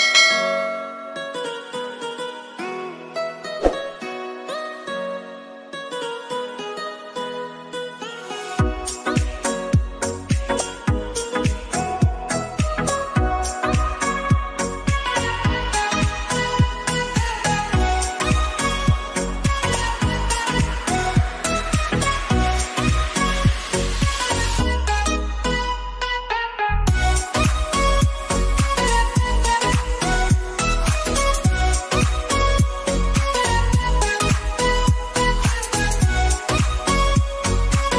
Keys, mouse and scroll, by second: 1.4 x, 1.6 ctrl+c, 2.1 ctrl+f, 3.1-10.8 drag, 18.9-21.3 alt+drag, 21.3-23.5 drag, 23.5-27.4 drag, 30.5 click, 33.3-36.7 drag, 37.8 Down.